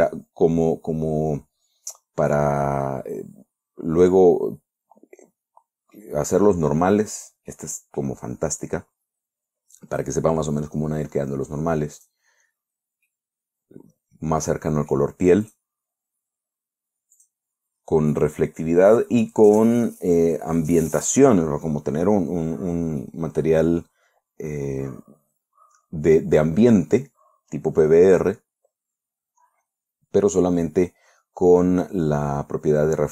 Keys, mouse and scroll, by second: 0.1 click, 2.8-4.6 scroll down 2, 4.6-6.6 middle drag, 7.0 scroll down 1, 7.5 scroll up 1, 7.9-8.7 middle drag, 9.1 click, 12.5 click, 13.1 scroll down 1, 13.5-15.6 middle drag, 15.9 click, 17.6 click, 23.5-33.1 drag.